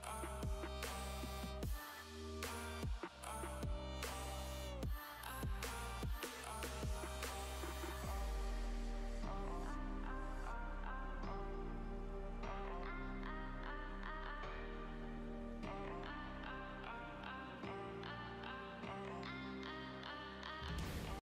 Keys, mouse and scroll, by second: 5.2 shift+a, 8.2 click, 10.6 shift+a, 19.5-21.2 middle drag.